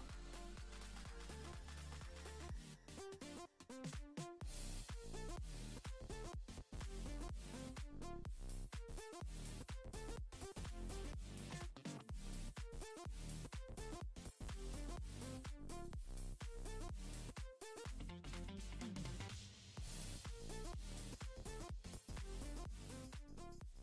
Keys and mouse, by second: 1.0 f, 1.5 shift+click, 2.4 middle click, 2.8 middle click, 3.0 f, 3.3 shift+c, 3.3 click, 3.6 click, 3.8 click, 4.2 middle click, 4.6 f, 5.1 s, 5.3 click, 6.1 click, 6.2 click, 6.5 click, 6.9-8.0 drag, 8.1 f, 8.2 shift+click, 8.4 shift+click, 9.0 shift+c, 9.0 click, 9.2 click, 9.6 click, 10.6 middle click, 10.8 middle click, 11.0 middle click, 11.3 middle click, 11.7 shift+middle click, 12.6 shift+click, 13.6 middle click, 13.8 middle click, 14.0 middle click, 14.2 middle click, 14.4 middle click, 14.8 shift+middle click, 15.3 shift+click, 15.7 shift+c, 15.8 click, 15.9 middle click, 16.1 click, 16.2 click, 16.3 middle click, 16.5 click, 16.6 click, 16.8 click, 17.5 f, 17.6 middle click, 17.8 s, 17.8 click, 18.7 shift+click, 18.9 middle click, 19.1 ctrl+middle click, 19.4 s, 19.5 f, 19.6 click, 20.5 shift+click, 20.7 middle click, 20.9 click, 21.2 shift+click, 21.7 f, 21.9 shift+c, 22.0 click, 22.2 click, 22.3 click, 22.5 middle click, 22.6 shift+middle click, 23.0 middle click, 23.1 middle click, 23.6 middle click.